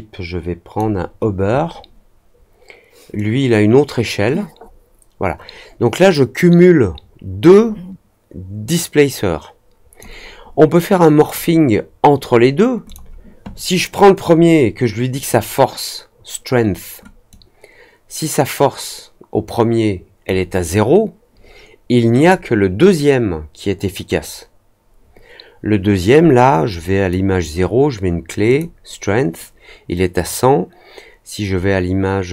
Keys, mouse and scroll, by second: 3.1-9.9 drag, 11.1 click, 12.8 click, 15.1 click, 17.2-20.2 drag, 22.1 click, 26.7 click, 28.4 click, 30.2-32.3 drag.